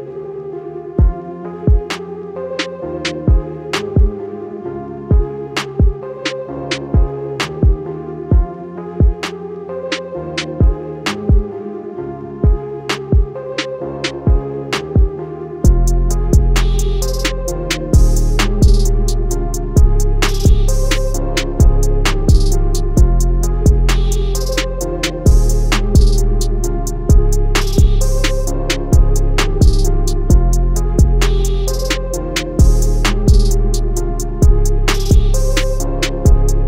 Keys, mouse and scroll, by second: 1.6 click, 3.6 click, 5.6 Escape, 6.2 scroll up 1, 10.0 click, 18.4 click, 21.8 Escape, 22.1 scroll up 1, 23.6 click, 25.8 Escape, 26.9 click, 30.6 Escape, 31.4 click, 33.9 Escape, 34.0-35.4 scroll up 1, 35.4 click.